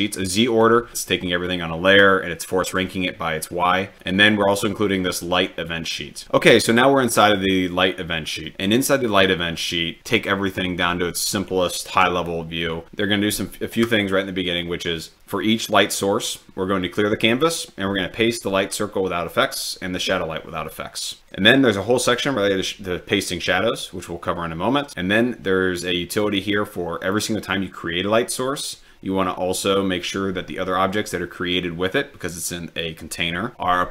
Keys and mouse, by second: 4.0-4.3 drag.